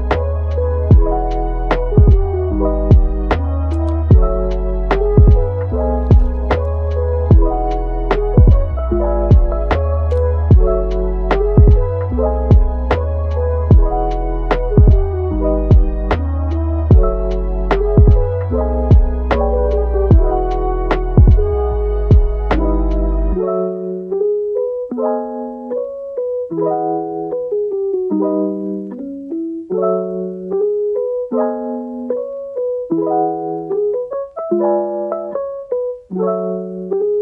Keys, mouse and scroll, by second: 0.2 drag, 0.6 g, 1.6 click, 2.9 g, 3.8 click, 4.1 g, 5.1 click, 5.3 g, 5.9 click, 6.2 g, 7.2 click, 7.4 g, 8.7 alt+s, 10.1 click, 10.5 alt+s, 11.6 middle click, 12.1 click, 12.6 alt+s, 13.3-14.1 middle drag, 14.1 click, 14.5-15.2 middle drag, 15.2 g, 15.8 middle click, 16.8 g, 18.2-19.9 middle drag, 19.9 Tab, 20.3-20.8 middle drag, 20.8-21.1 scroll up 1, 21.1 scroll down 2, 21.3-22.5 middle drag, 22.5 Tab, 23.1 click, 23.7 click, 24.0 middle click, 24.5 g, 25.7-26.8 middle drag, 26.8-27.4 scroll up 1, 27.4 click, 27.8 g, 30.4 middle click, 30.8 g, 31.7 click, 32.2 g, 35.8 middle click, 36.5 Tab, 36.8-37.2 middle drag.